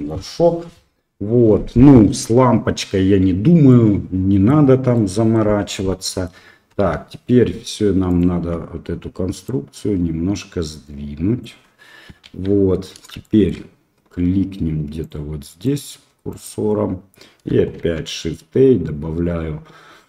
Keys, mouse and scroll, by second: 3.6 middle click, 4.9 middle click, 5.9 middle click, 6.7 KP_1, 8.0 shift+click, 9.4-11.4 drag, 12.2 KP_3, 13.2 shift+drag, 15.0 click, 16.3 click, 17.7 shift+a.